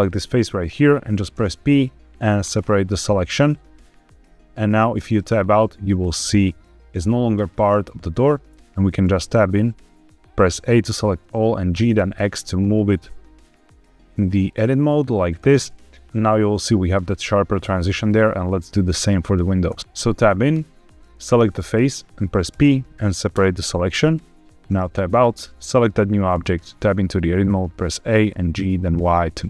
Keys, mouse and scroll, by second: 1.2 p, 4.9 Tab, 5.7 click, 8.4 Tab, 8.9 a, 11.6 g, 11.8 x, 15.1 click, 15.3 Tab, 15.5 click, 15.9 middle click, 17.8 click, 18.6 middle click, 19.6 Tab, 20.4 Tab, 21.1 click, 22.4 p, 24.6 Tab, 25.0 click, 26.2 Tab, 26.7 a, 28.7 y.